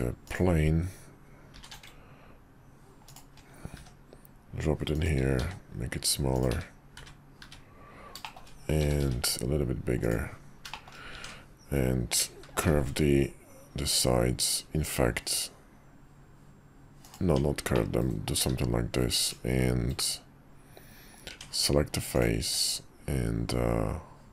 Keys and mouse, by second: 1.5 r, 3.7 g, 5.4 s, 6.5 `, 7.0 `, 7.4 `, 8.2 shift+middle click, 8.8 s, 10.7 shift+middle click, 11.1 Tab, 12.6 ctrl+shift+b, 17.2 Tab, 17.7-18.1 middle drag, 18.4 q, 21.3 Tab, 22.1 click, 22.4 q.